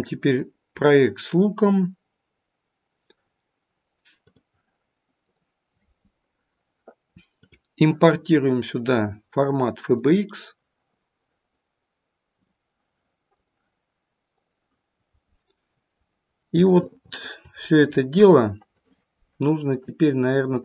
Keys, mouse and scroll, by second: 18.6 click, 20.4 click.